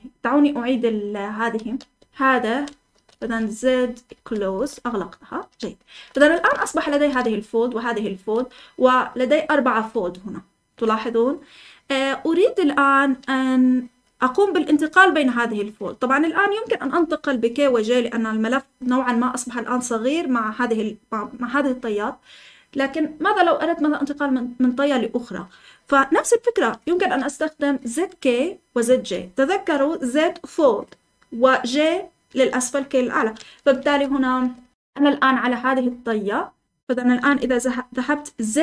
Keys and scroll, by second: 0.0-9.7 typing, 33.8 Escape, 34.7 k.